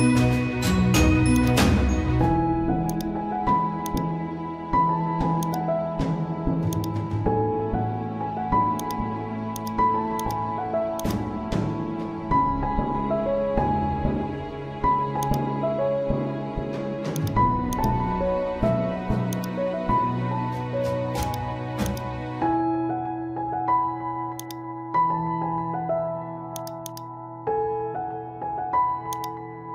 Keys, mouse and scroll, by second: 0.8 ctrl+t, 1.3-14.2 drag, 15.2 click, 20.2 ctrl+t, 21.2-24.4 drag, 26.1 right click, 26.5-28.7 drag, 28.7 ctrl+t, 29.1-29.7 drag.